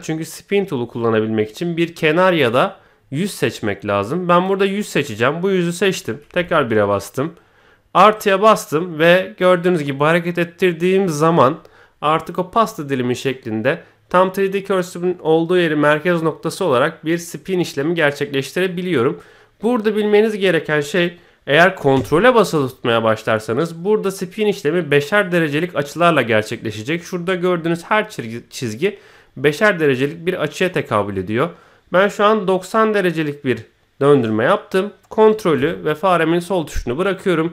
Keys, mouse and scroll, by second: 2.4 click, 4.3 click, 4.8-6.1 middle drag, 6.3 KP_1, 8.1-35.4 drag, 37.4-37.5 middle drag.